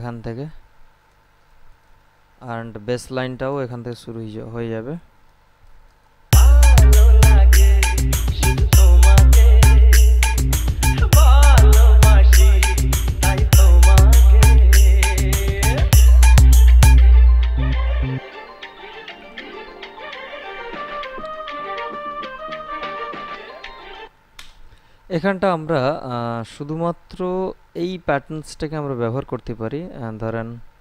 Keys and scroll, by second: 6.5 space, 24.3 space.